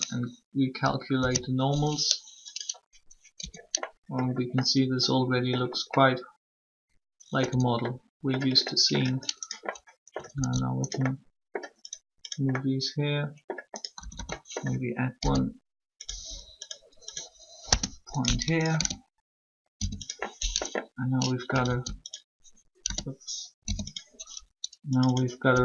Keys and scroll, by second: 3.3 Tab, 7.4 Tab, 13.8-14.9 typing, 17.6 Return, 19.7 shift+0, 22.8 alt+s, 23.6 0, 25.5 s.